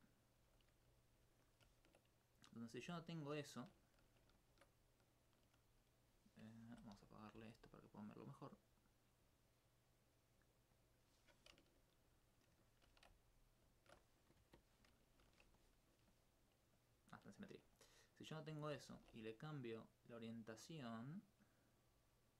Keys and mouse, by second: 0.4 Tab, 1.0 alt+click, 1.2 alt+c, 2.2 right click, 2.9 alt+click, 6.0 alt+s, 6.8 b, 7.2 right click, 7.4 right click, 8.1 middle click, 10.7 click, 13.2 alt+click, 18.9 ctrl+e, 21.8 click.